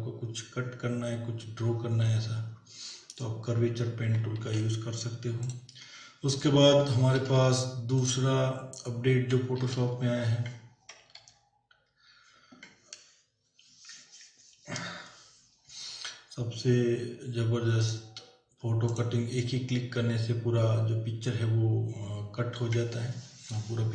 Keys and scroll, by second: 4.4 ctrl+w, 7.1 ctrl+w, 9.6 ctrl+w, 11.2 ctrl+-.